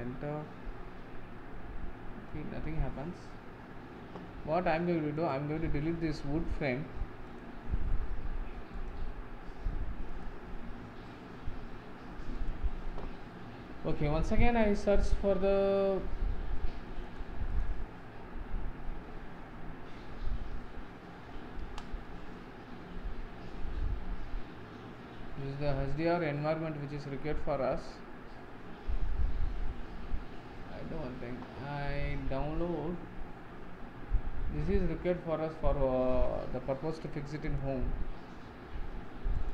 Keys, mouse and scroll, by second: 1.7 scroll down 6, 5.3-17.7 drag, 21.8 ctrl+space.